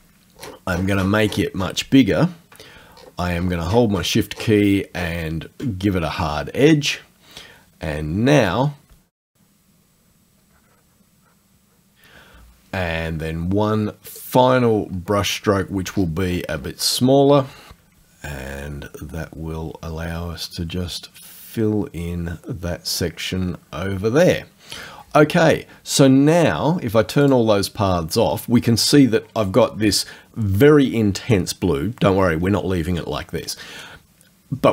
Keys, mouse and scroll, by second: 0.4-0.7 scroll down 1, 1.4 scroll down 2, 2.7 shift+middle click, 3.0-3.6 shift+scroll up 3, 4.3-4.7 shift+scroll down 1, 5.0 shift+scroll down 2, 8.9-12.0 drag, 14.1 click, 14.9 scroll up 2, 15.9-17.1 scroll up 2, 18.0-24.1 drag, 27.3 click.